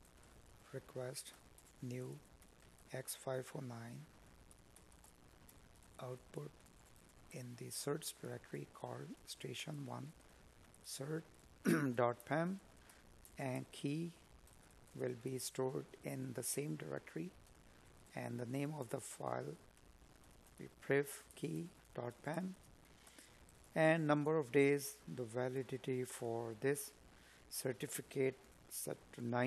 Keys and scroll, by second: 4.5 space, 6.9 space, 14.5 space, 16.1 space, 22.4 space.